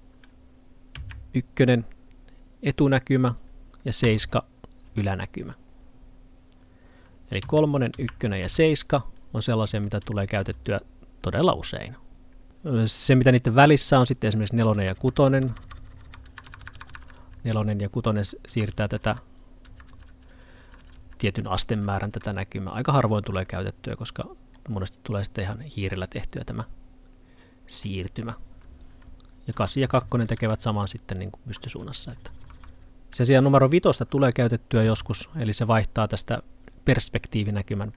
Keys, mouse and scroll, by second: 5.7-9.8 scroll down 1, 24.6 middle click, 33.2 middle click.